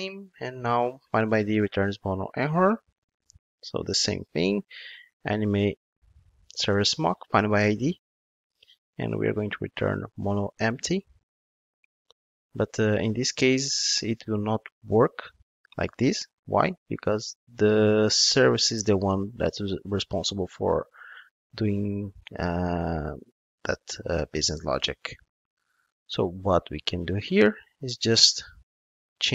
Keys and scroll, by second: 6.7 Return, 27.0 ctrl+Tab.